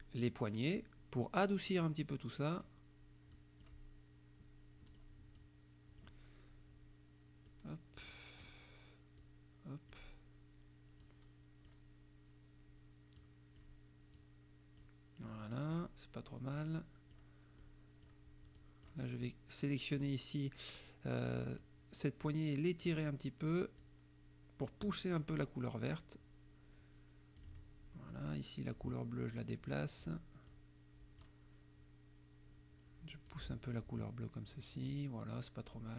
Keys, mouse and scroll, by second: 1.8 click, 3.3 click, 4.9 click, 5.4 click, 7.5 click, 9.2 click, 11.0 click, 13.2 click, 14.1 click, 15.3 click, 16.6 click, 17.6 click, 18.6 click, 19.9 click, 21.6-23.1 drag, 23.8-25.4 drag, 27.4 click, 28.7 click, 29.4-30.1 scroll down 1, 30.5 click, 33.3-35.1 drag, 35.8 click.